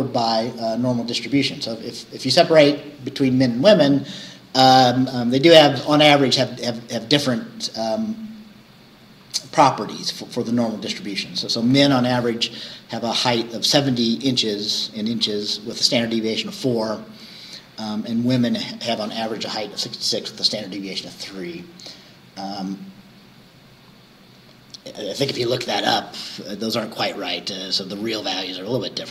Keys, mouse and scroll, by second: 15.7 scroll down 2.